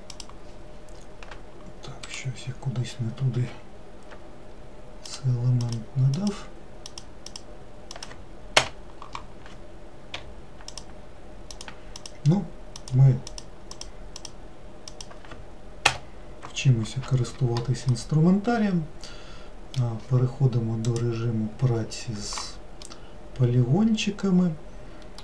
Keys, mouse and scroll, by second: 10.3 k, 18.0-21.0 middle drag, 21.0-22.9 drag, 22.9-25.2 middle drag.